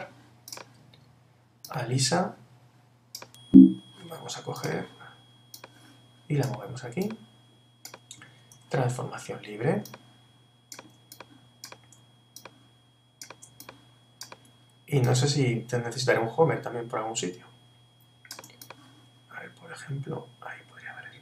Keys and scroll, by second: 8.5 super+t, 10.9 super+t.